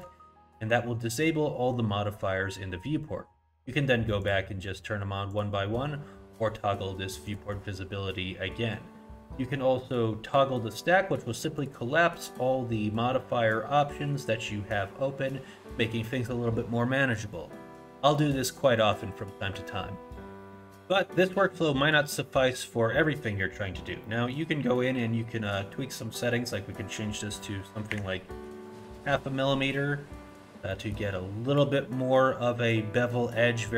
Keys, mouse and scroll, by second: 4.2 click, 5.3 click, 7.3 click, 11.6 click, 24.0 middle click, 24.4-25.4 scroll up 1, 25.4 click, 30.1 scroll up 1, 30.3 middle click, 30.7 middle click.